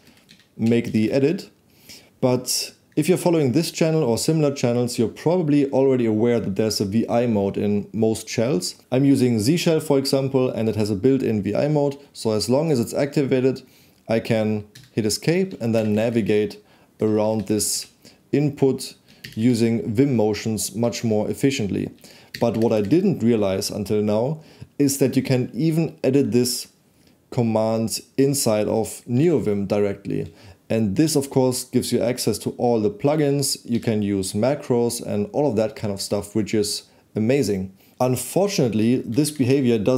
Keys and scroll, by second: 0.0 Delete, 0.7-1.4 typing, 14.8 Escape, 16.0 shift+b, 17.3 shift+w, 18.1 w, 19.3 shift+b, 20.8 shift+w, 22.3 shift+b, 23.3 shift+b, 29.1 v, 31.1 k, 33.1 k, 33.2 k, 33.7 0, 39.1 shift+z.